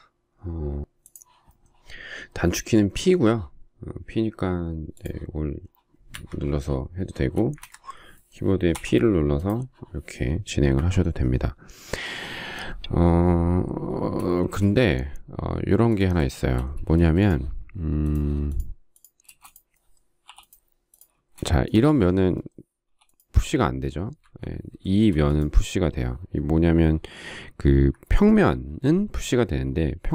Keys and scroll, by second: 6.0 Escape, 7.3 space, 7.5 Escape, 8.7 p, 10.7 Escape, 14.3 space, 16.9 space, 19.2 space, 20.2 p, 21.0 space, 22.8 p, 24.1 Escape, 27.6 Escape, 28.5 space.